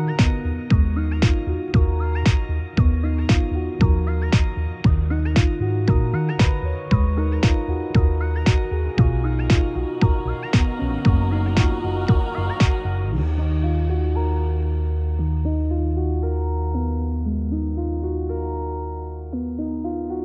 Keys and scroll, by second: 7.3 ctrl+d.